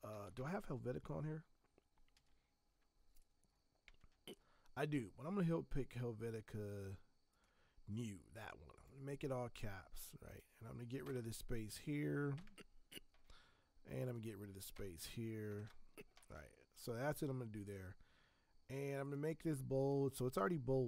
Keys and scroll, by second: 0.0-0.7 typing, 2.1 v, 11.0 Return, 11.0 BackSpace, 12.3 BackSpace, 14.7 BackSpace, 15.5 ctrl+Return.